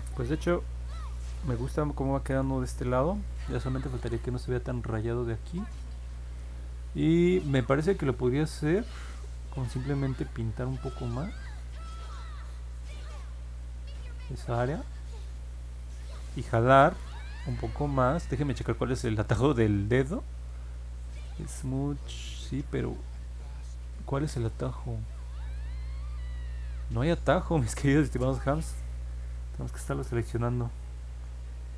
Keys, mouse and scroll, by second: 0.2 scroll down 2, 1.2 scroll up 1, 1.7 alt+middle click, 2.6 middle click, 8.2 1, 11.1-13.8 drag, 14.7 click.